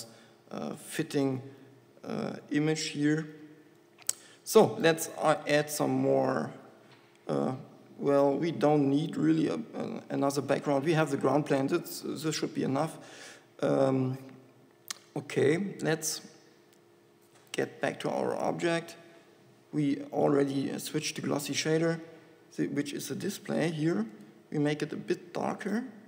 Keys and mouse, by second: 5.6 Tab, 10.7 Tab, 18.2-26.0 drag.